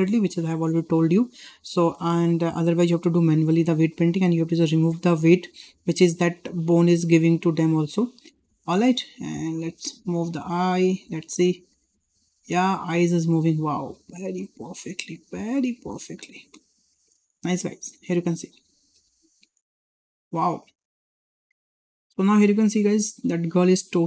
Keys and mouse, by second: 8.5 shift+middle click, 8.8-9.1 middle drag, 9.6-9.9 middle drag, 10.5 click, 10.9 middle drag, 11.5 g, 14.5 g, 16.2 click, 16.4 g, 17.8 click, 18.2-18.7 middle drag, 18.9 g, 20.5 click, 20.7 g.